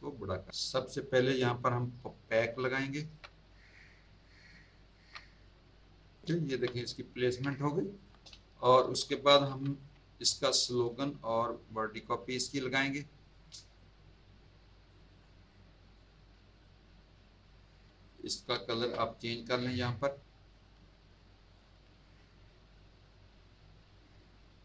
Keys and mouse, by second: 3.2 alt+shift+click, 4.5 alt+shift+click, 5.3 click, 6.4 z, 6.8 click, 7.5 z, 7.6 alt+click, 8.3 space, 8.4 click, 9.7 click, 10.3 space, 10.4 click, 11.4 click, 12.4 click, 13.7 click, 15.5 click, 16.6 click, 18.2 Tab, 19.6 click, 20.1 click, 20.5 click, 21.4 click.